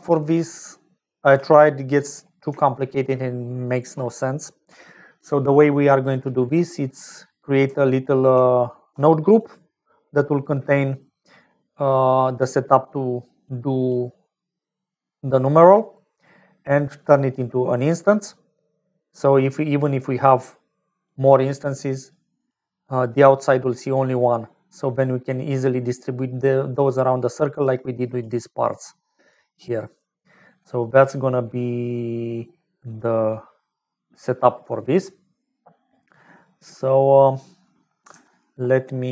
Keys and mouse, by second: 0.0 d, 0.3 click, 1.2 d, 1.4 d, 2.6 shift+middle click, 7.6-30.6 typing, 9.3-11.0 drag, 12.5-13.8 drag, 17.1 click, 17.6 click, 19.6 click, 20.4 click, 21.5 middle click, 24.1-26.7 middle drag, 27.7-30.4 middle drag.